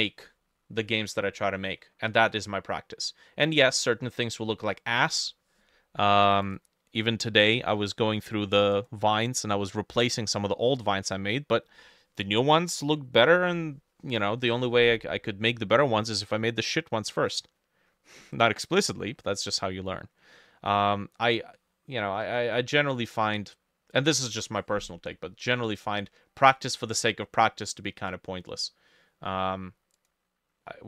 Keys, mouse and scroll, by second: 0.5 middle click, 1.5 middle click, 3.1 middle click, 3.8 middle click, 4.5 middle click, 5.0 middle click, 20.5 middle click, 23.2 middle click, 25.2 middle click, 26.5 middle click, 27.1 middle click, 30.7 middle click.